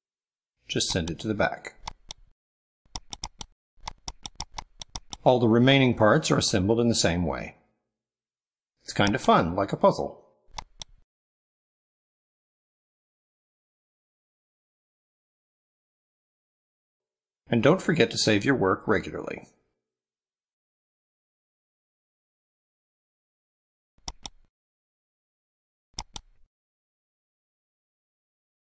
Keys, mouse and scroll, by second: 0.9 ctrl+click, 1.6 ctrl+click, 2.9 click, 3.4 click, 3.6 ctrl+click, 3.9 click, 4.3 click, 4.5 click, 4.8 click, 5.4 ctrl+middle click, 5.8 ctrl+scroll down 1, 6.2-6.5 ctrl+middle drag, 7.0 click, 7.6 ctrl+scroll up 1, 8.3 middle click, 8.9 click, 10.6 click, 11.6 click, 11.9 drag, 12.2 click, 12.7 click, 12.9 click, 13.1 click, 13.3 click, 13.7 click, 14.0 click, 14.5 click, 14.9 click, 15.1 click, 15.3 click, 15.5 click, 16.5 click, 16.7 click, 16.9 click, 17.6 click, 18.1 click, 18.5 click, 18.8 click, 19.1 click, 19.4 click, 19.6 click, 19.9 click, 20.1 click, 20.4 click, 20.9 click, 21.4 click, 21.6 click, 22.0 click, 22.3 middle click, 22.9 ctrl+scroll down 2, 24.0 click, 25.8 click, 27.9 click.